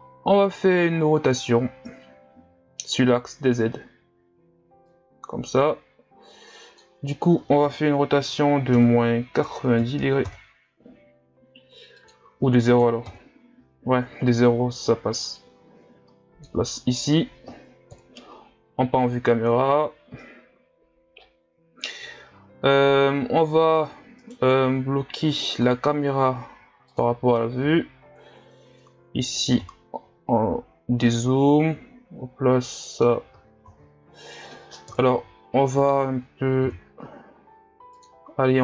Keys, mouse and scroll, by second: 5.1-18.0 drag, 18.0 KP_0, 24.2 right click, 26.9-27.4 drag, 27.6 n, 28.2-30.1 scroll down 3, 30.1-30.4 scroll down 1, 31.1-33.7 middle drag, 33.7 ctrl+z, 34.9 KP_3, 36.7 r.